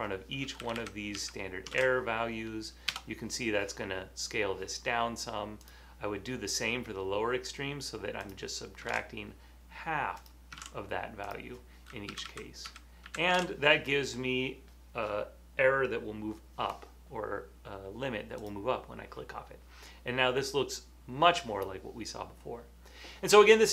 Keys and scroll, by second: 0.7 Left, 1.1 Left, 3.4 Return, 9.0 super+v, 10.7 super+v, 12.2 Left, 12.3-13.4 typing, 13.6 super+v, 15.6 typing.